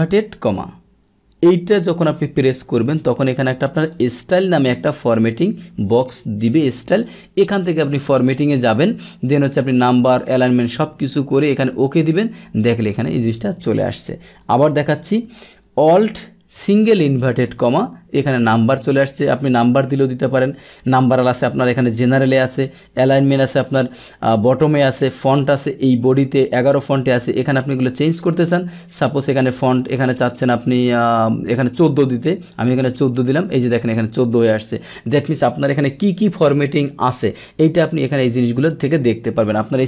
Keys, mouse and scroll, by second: 2.6-3.9 drag, 7.4 click, 8.7 click, 9.8 click, 10.1 click, 10.6 click, 11.3 click, 12.8 click, 13.6 click, 14.4 click, 18.3 click, 19.4 click, 27.8 click, 31.7 click, 32.5 click.